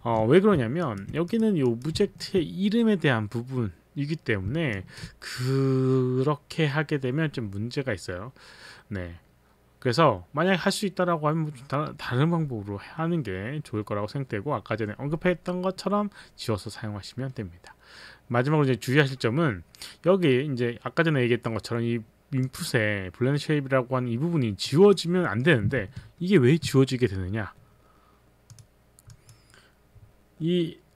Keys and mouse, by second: 0.0 alt+Tab, 0.8 alt+click, 2.2 alt+middle click, 4.7 alt+click, 5.1 alt+click, 22.5 click, 24.6 click, 25.3 middle click, 25.7 z, 28.5 click, 29.1 click.